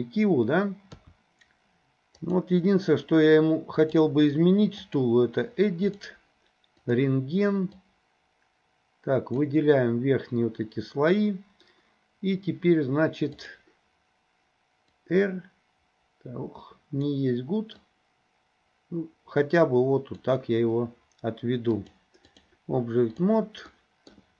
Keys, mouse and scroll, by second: 1.0 KP_3, 2.2 click, 3.8-5.1 drag, 5.9 click, 7.0-9.5 drag, 13.4 click, 15.1 click, 17.9-20.3 drag, 21.8-22.5 drag, 23.8-24.1 middle drag.